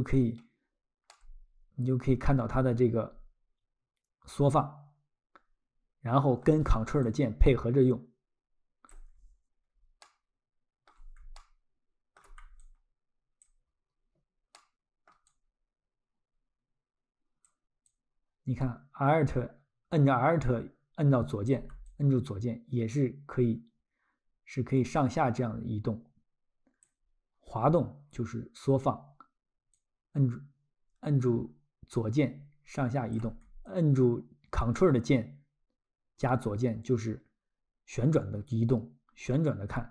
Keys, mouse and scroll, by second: 1.1 alt+middle click, 6.4 alt+middle click, 7.0 ctrl+click, 8.9 ctrl+click, 9.5 alt+scroll, 10.0 alt+middle click, 11.4 ctrl+middle click, 12.6 alt+click, 13.8 alt+scroll, 14.6 alt+middle click, 15.3 alt+click, 17.4 alt+click, 17.9 alt+click, 21.5 alt+click, 21.8 alt+click, 26.8 alt+click, 27.3 alt+scroll, 29.8 alt+click, 33.1 alt+click, 33.7 ctrl+click.